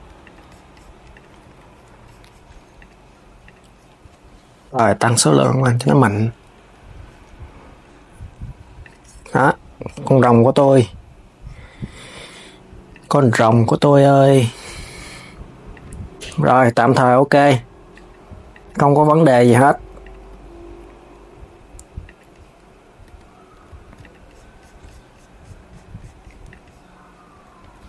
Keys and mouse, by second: 0.8 click, 1.1 s, 2.5 click, 3.1 click, 4.7 click, 6.5 s, 8.5 click, 12.6 click, 13.5 s, 15.4 click, 15.9 click, 17.0 click, 17.6 click, 18.2 click, 19.1 Tab, 19.7 click, 20.0 g, 22.7 Tab, 23.4 s, 23.7 click, 26.2 click, 27.3 s.